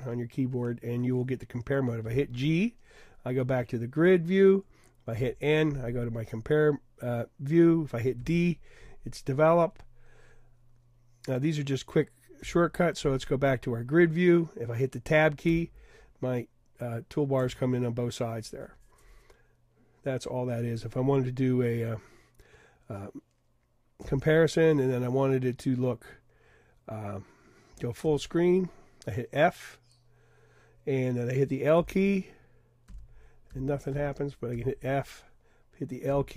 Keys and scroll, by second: 2.1 g, 2.4 g, 3.0 g, 5.2 n, 7.0 n, 8.2 d, 9.0 d, 12.4 g, 15.5 Tab, 24.0 n, 25.0 n, 28.1 f, 28.9 f, 31.8 l, 33.0-34.6 typing, 36.1 |.